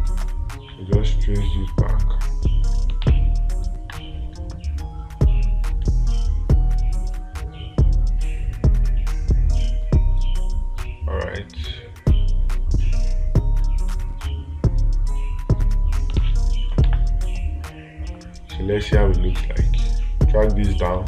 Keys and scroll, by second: 3.5 space, 16.6 space.